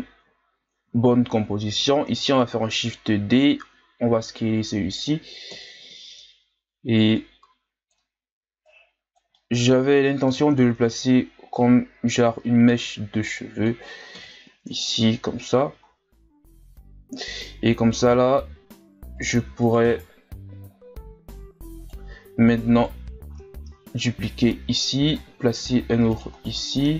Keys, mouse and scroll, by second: 0.4-1.0 scroll up 1, 1.0-2.0 scroll down 2, 2.0 shift+d, 3.7 s, 5.5 KP_1, 6.5-7.2 scroll up 1, 7.2-9.3 drag, 9.3 scroll up 1, 9.4 middle click, 10.3 KP_3, 11.5-14.1 drag, 14.1 KP_1, 14.7 Tab, 15.0-15.4 scroll down 3, 15.4 a, 15.8-16.9 scroll down 1, 16.9-18.1 scroll up 7, 18.1 Tab, 19.2-20.5 right drag, 20.5 g, 22.7 right click, 23.6 shift+d, 26.3-26.8 scroll down 3.